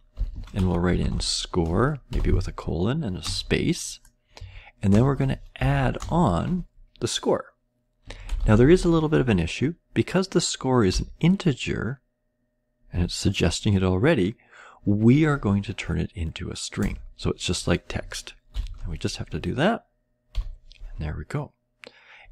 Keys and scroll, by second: 0.0-2.0 typing, 3.2 space, 4.3 Right, 4.6-5.3 typing, 7.7-9.0 typing, 10.8 ., 13.4-14.2 typing, 16.7 Return, 18.4 (, 20.2 ;.